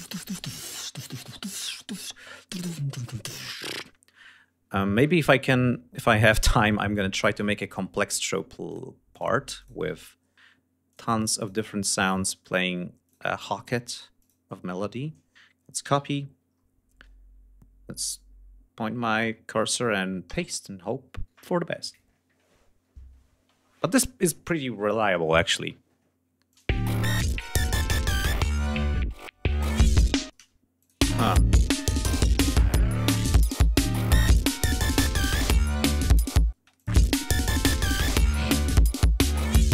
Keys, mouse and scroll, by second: 0.5 ctrl+click, 0.8 ctrl+scroll down 2, 1.7 scroll down 2, 2.5 ctrl+click, 3.0-3.3 ctrl+scroll down 3, 3.6-4.6 scroll up 4, 4.6-6.1 scroll up 6, 6.7 ctrl+click, 7.0 ctrl+scroll up 2, 8.2 ctrl+click, 8.7 ctrl+click, 9.1 ctrl+click, 9.5-10.0 ctrl+scroll up 5, 10.4 ctrl+click, 10.9 ctrl+click, 11.4 ctrl+click, 11.7 ctrl+scroll up 2, 12.6 ctrl+click, 12.9 ctrl+scroll up 2, 13.7 ctrl+click, 15.4 ctrl+c, 16.0 ctrl+scroll up 2, 19.8 ctrl+v, 25.4 ctrl+scroll down 2, 26.1 ctrl+click, 26.2 ctrl+space, 26.8 g, 29.4 shift+right click, 29.9 shift+space, 30.4 shift+click, 30.6 shift+space, 31.7 shift+click, 33.2 d, 33.4 scroll down 2, 34.2 scroll down 2, 35.0 click, 36.1 space, 36.3 click, 36.6-36.9 scroll down 1, 37.7 scroll down 1.